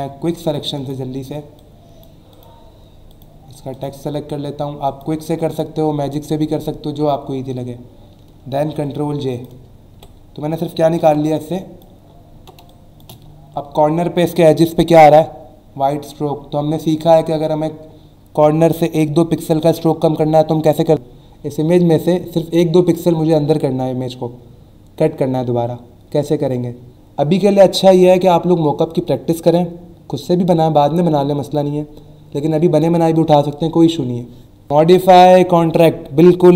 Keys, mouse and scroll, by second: 0.1 w, 0.8 click, 1.6 shift+click, 3.1 shift+click, 3.7 shift+click, 4.9 shift+click, 5.5 shift+click, 6.4 alt+scroll up 1, 9.3 click, 9.9 Delete, 11.4 click, 12.0 alt+scroll up 1, 12.6 space, 12.7 click, 13.2 alt+scroll up 1, 17.0 click.